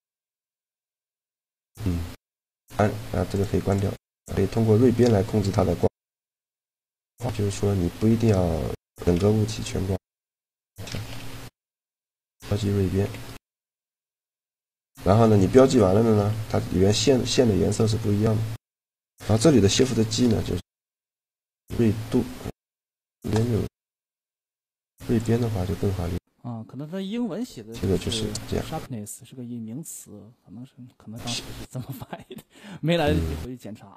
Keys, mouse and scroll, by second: 3.0-5.6 right drag, 4.7-6.5 drag, 6.8 Tab, 7.6 a, 8.9 c, 10.3 right click, 10.8 ctrl+e, 11.0 right click, 11.2 right click, 12.3 a, 12.8 Tab, 14.8 Tab, 15.2 a, 15.9 a, 19.6 shift+g, 24.6 shift+g, 25.5 click, 27.8 g, 32.2-33.9 middle drag.